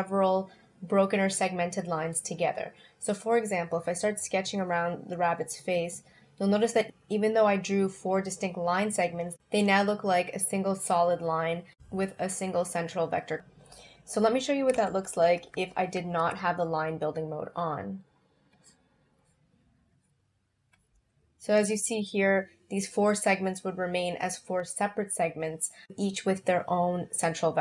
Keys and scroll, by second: 8.1 space, 14.8 super+z.